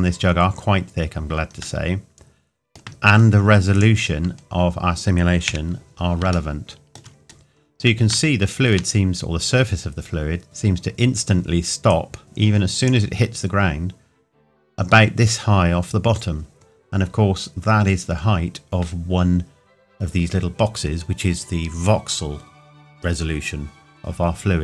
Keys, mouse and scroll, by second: 1.8 middle click, 2.9 scroll down 1, 3.7 click, 4.2 scroll down 1, 6.5 shift+middle click, 7.2-7.5 scroll up 1, 8.3 shift+middle click, 11.9 click.